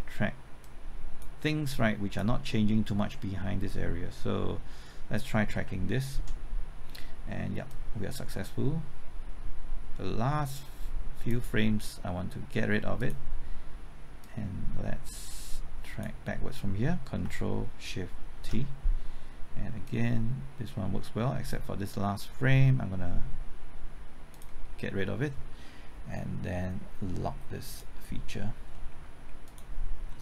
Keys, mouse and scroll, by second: 5.6 typing, 6.1 ctrl+t, 7.7-16.8 drag, 18.3 ctrl+shift+t, 19.8-21.8 drag, 28.7 middle click, 29.4 click, 30.1 middle click.